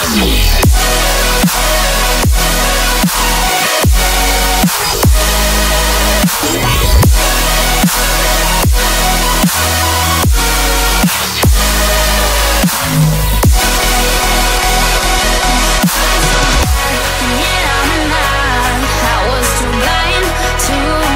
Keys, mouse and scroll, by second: 0.2 shift+middle click, 1.9 scroll up 3, 3.7 scroll down 1, 4.4-5.4 scroll down 8, 5.4 middle click, 12.5 shift+d, 13.1 shift+d, 14.7 right click, 17.4 p.